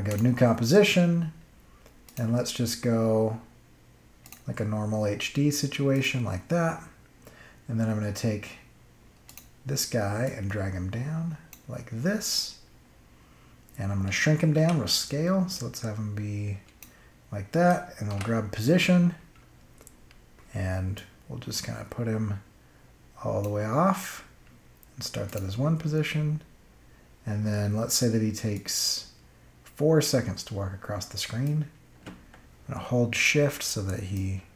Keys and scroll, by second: 14.5 s, 18.0 p, 19.5 [.